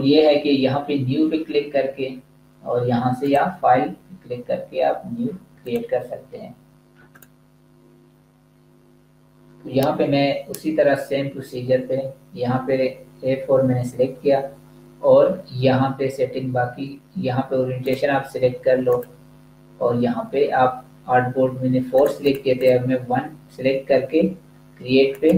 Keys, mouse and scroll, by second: 3.1 click, 17.7 click, 19.5 scroll down 1, 21.8 click, 25.0 click.